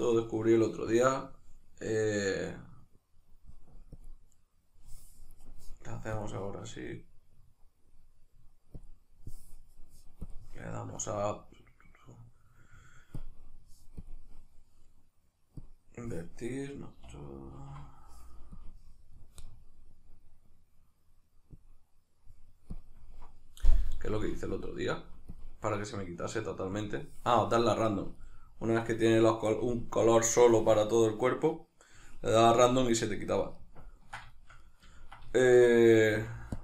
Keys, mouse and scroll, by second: 17.5 alt+h, 28.3-36.6 middle drag, 36.1 f.